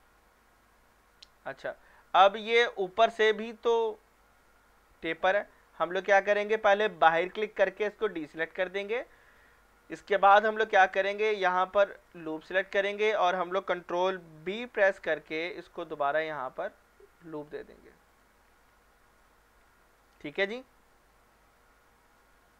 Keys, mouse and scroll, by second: 0.4 scroll up 1, 1.3-1.9 shift+middle drag, 2.9-3.5 middle drag, 5.3 scroll up 1, 7.3 click, 10.2 scroll up 1, 12.0 alt+click, 12.5 scroll down 1, 14.5 ctrl+b, 16.7 scroll down 1, 18.1 click, 18.5 scroll down 1, 18.9 shift+middle click, 19.6-20.1 scroll down 2, 20.1-22.1 scroll up 2, 22.3 shift+middle click.